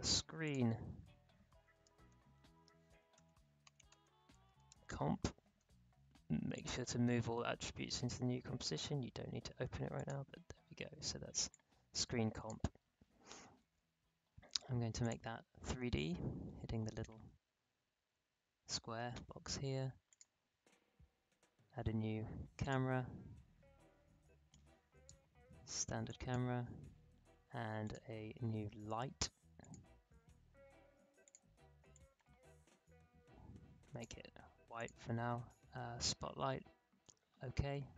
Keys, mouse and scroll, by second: 0.4 click, 1.4-5.4 typing, 6.5 click, 9.9 click, 9.9-14.9 drag, 15.0 click, 20.0 click, 21.3 click, 22.6-34.7 drag.